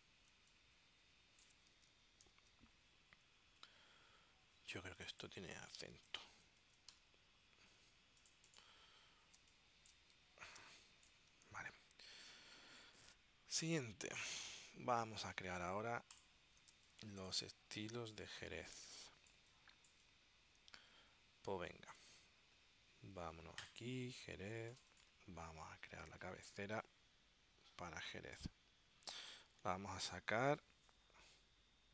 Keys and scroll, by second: 0.5 space, 6.2-7.5 typing, 9.5 space, 10.7 space, 11.5 super+s, 16.8 space.